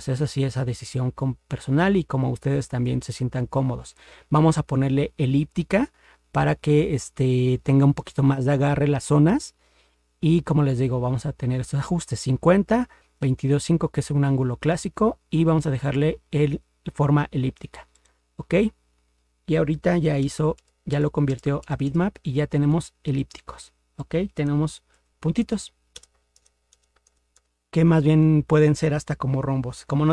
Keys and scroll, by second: 20.2 ctrl++, 20.6 ctrl++.